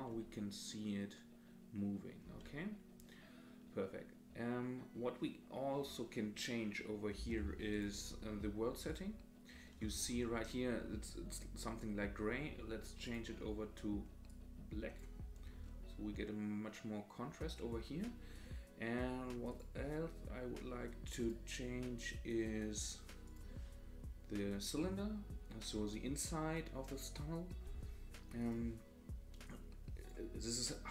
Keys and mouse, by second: 7.8-8.9 drag, 13.0 click, 19.6-21.3 drag, 23.3 click, 28.4 click, 29.4 click.